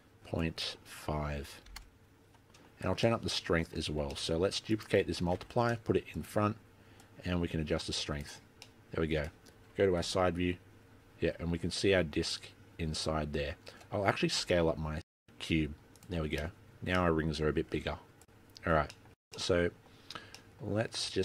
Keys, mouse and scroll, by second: 0.5 click, 2.7 middle click, 3.2 middle click, 4.0 scroll down 2, 4.2 middle click, 4.8 click, 5.5 shift+d, 7.1 click, 8.8 middle click, 10.1 KP_1, 11.1-11.7 scroll up 3, 13.6 scroll down 4, 14.5 s, 16.7 middle click, 17.0 middle click, 17.5 s, 17.9-18.5 scroll down 1, 18.5 middle click, 18.5 scroll down 5, 18.7 s, 19.0 scroll down 2, 19.2 middle click, 19.4 middle click, 20.2 scroll up 2, 20.5 middle click, 20.8 scroll down 1, 21.1 scroll up 4.